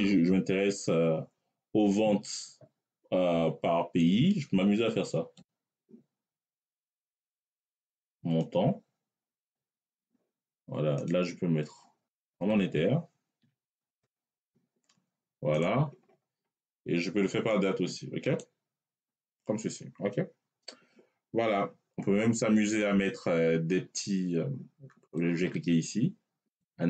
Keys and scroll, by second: 13.3 m, 13.8 Return.